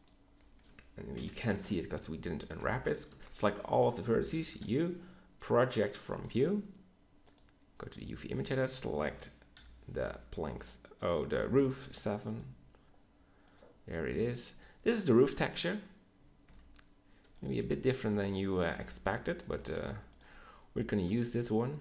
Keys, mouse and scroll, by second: 1.1 KP_3, 1.5 Tab, 3.0 ctrl+l, 4.5 u, 16.4 s, 17.4 g, 18.0 s, 18.8 g, 19.6 s, 21.1 s, 21.7 s.